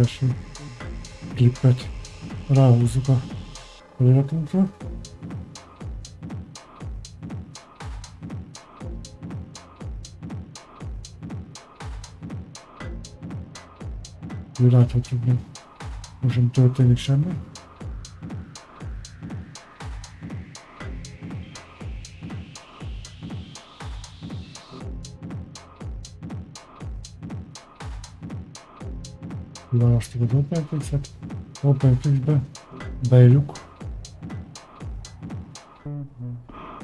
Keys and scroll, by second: 35.5 a, 36.6 s.